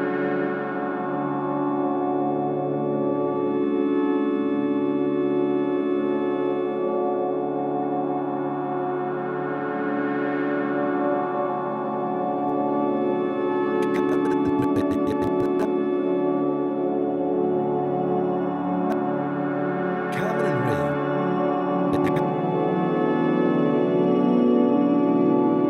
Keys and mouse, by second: 1.4 click, 2.4-3.8 drag, 3.8 a, 4.7 click, 6.0 click, 7.6 click, 8.4 click, 8.7 click, 9.2 click, 10.6-11.5 typing, 12.4 click, 12.8-15.5 drag, 15.8-16.6 typing, 18.3 shift+click, 18.9 click, 19.3 typing, 20.8 typing, 21.9 click, 23.1 alt+shift+click, 23.5-23.9 ctrl+alt+drag, 24.6 click, 24.9 click, 25.1-25.6 typing, 25.3-25.6 drag.